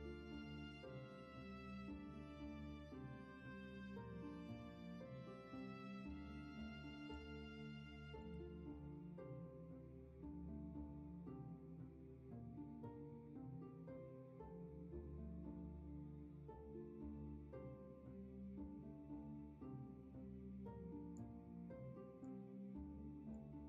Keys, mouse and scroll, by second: 6.8 ctrl+z, 9.6 ctrl+z, 14.1 ctrl+z.